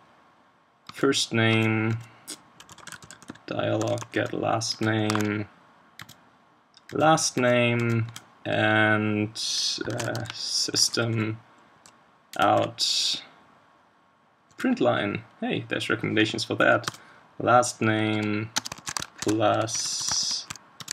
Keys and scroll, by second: 5.1 super+1.